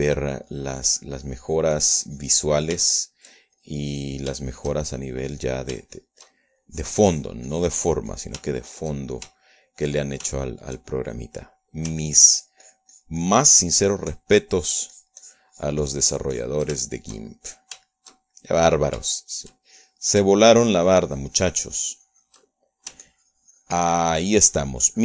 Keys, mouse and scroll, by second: 0.0 shift+middle click, 0.5 shift+click, 1.7-4.3 drag, 4.4 shift+middle click, 5.0 shift+click, 5.9 shift+middle click, 6.9 shift+middle click, 8.1 shift+click, 8.5-9.8 drag, 9.9 shift+middle click, 10.9 shift+middle click, 11.8 shift+middle click, 12.8 click, 13.5-18.1 ctrl+drag, 18.3 ctrl+shift+middle click, 19.3 shift+middle click, 19.8 shift+middle click, 20.7-21.9 shift+drag, 22.1-24.4 ctrl+drag, 24.5 ctrl+click.